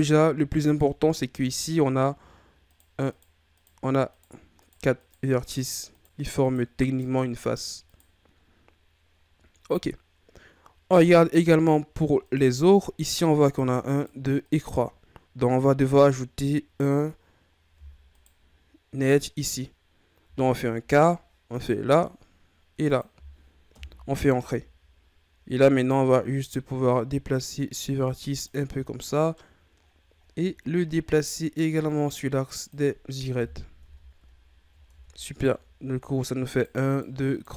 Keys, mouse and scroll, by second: 0.4 scroll down 1, 0.7-1.8 ctrl+scroll up 2, 1.8 scroll up 1, 2.7 right click, 3.1 right click, 3.6 right click, 4.1 right click, 4.6 right click, 5.0 right click, 5.4 right click, 5.9 right click, 6.4 right click, 6.9 right click, 7.4 right click, 7.9 right click, 8.4-9.2 scroll down 2, 9.2-10.0 scroll down 1, 10.0-11.1 scroll up 3, 11.1-11.6 ctrl+scroll down 3, 12.2 right click, 13.4 right click, 13.9 right click, 14.4 right click, 18.1 right click, 20.2 k, 24.5 scroll down 1, 24.6-25.3 scroll up 3, 25.8 right click, 26.4 right click, 28.8 shift+scroll down 6, 29.0 scroll up 1, 29.1 middle click, 29.5-30.5 scroll down 8, 30.5 scroll up 3, 30.8-31.8 middle drag, 31.8-33.4 drag, 33.4 KP_1, 33.8 Tab, 34.4-34.9 scroll up 4, 34.9 Tab, 35.2-36.4 scroll up 4, 36.4 scroll up 1, 36.5 right click, 36.8 right click, 37.3 right click.